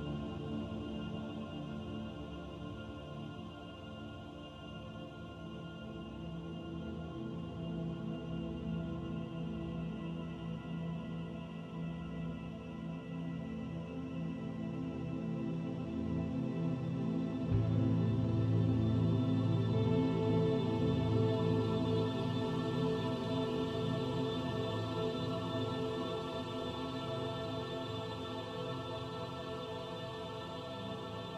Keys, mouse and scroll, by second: 0.1-1.8 scroll up 1, 4.6 middle click, 7.1-7.5 scroll down 2, 7.5 shift+middle click, 8.5 middle click, 10.0 click, 10.9 middle click, 11.8 click, 12.2 middle click, 14.1 middle click, 15.0 click, 17.5 middle click, 19.2 r, 21.3 click, 21.9 r, 23.9 click, 25.1 middle click, 26.1 middle click, 26.6 click, 28.0 s, 31.2 ctrl+a.